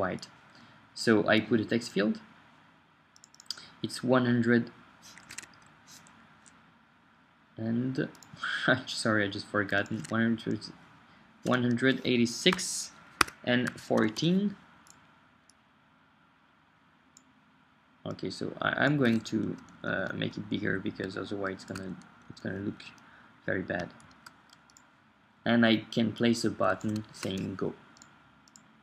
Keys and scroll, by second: 5.4 super+Tab, 10.0 super+Tab, 12.5 Tab, 12.8-15.0 typing, 13.2 Tab, 14.2 Return, 19.4 shift+Up, 19.7 Left, 24.0 shift+Right, 26.9-28.8 typing.